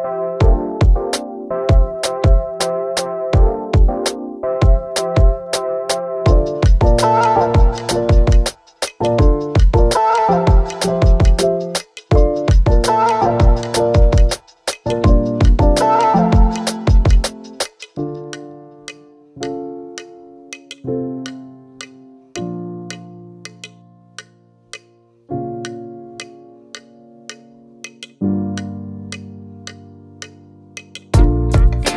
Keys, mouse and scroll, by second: 8.3 click, 20.9 click, 25.9 click, 29.7 click, 31.5-31.9 shift+drag.